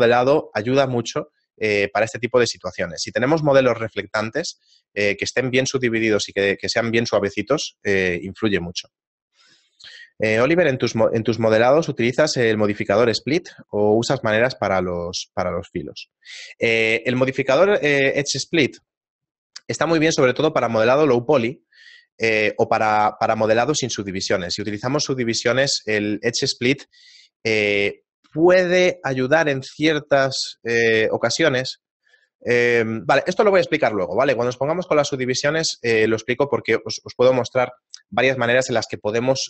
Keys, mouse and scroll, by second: 10.2 right click.